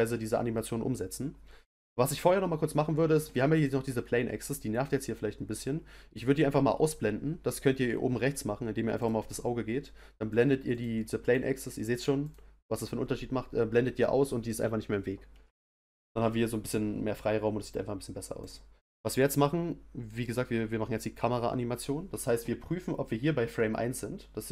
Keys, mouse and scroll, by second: 3.5 click, 9.0 click, 10.3 click, 10.7 click, 11.2 click, 12.2 click, 18.4 click.